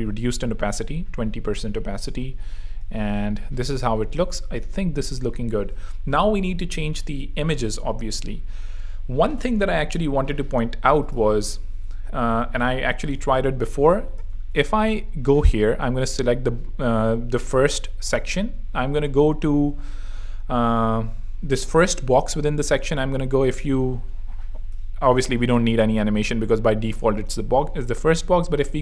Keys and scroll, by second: 2.6 super+3, 5.5 super+2, 13.4 alt+l, 14.1 alt+shift+l, 14.3 alt+shift+e.